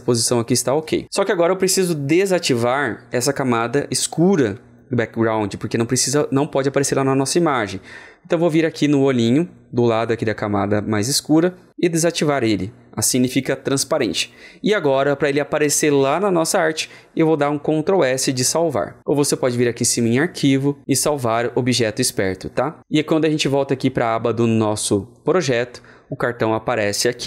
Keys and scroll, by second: 17.8 ctrl+alt+t, 18.2 ctrl+s.